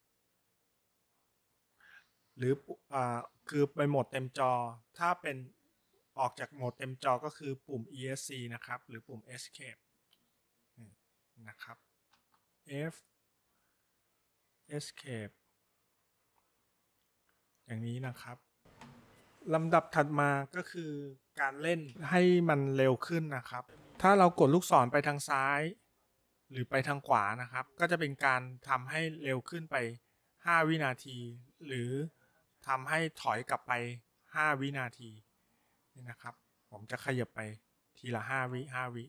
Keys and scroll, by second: 10.0 Escape, 12.2 f, 29.0 Right, 31.1 Left, 35.6 Right, 36.3 Right, 37.6 Right, 38.1 Right, 38.6 Right.